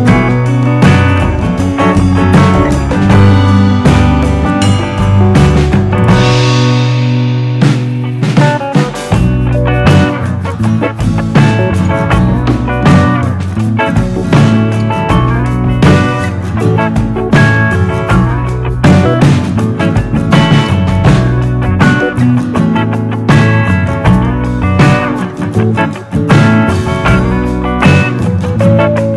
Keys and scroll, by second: 9.7 super+z.